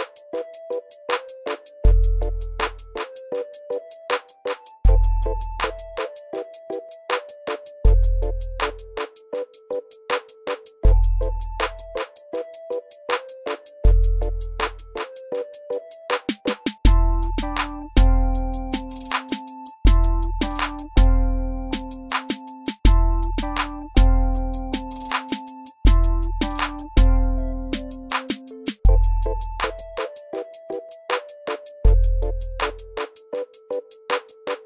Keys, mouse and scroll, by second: 2.0 ctrl+z, 3.6-4.5 click, 4.8 ctrl+z, 5.7-7.0 drag, 7.0 ctrl+z, 8.1-9.4 drag, 9.5 ctrl+z, 11.4 ctrl+scroll up 1, 12.3 ctrl+scroll down 1, 13.2-14.2 click, 14.2 ctrl+z, 14.5 click, 17.6 x, 18.2 click, 18.8 ctrl+scroll down 1, 19.1 z, 19.2 click, 19.6 v, 19.7 click, 23.1 F2, 25.0-27.2 drag, 27.4 ctrl+z, 28.2-33.9 drag.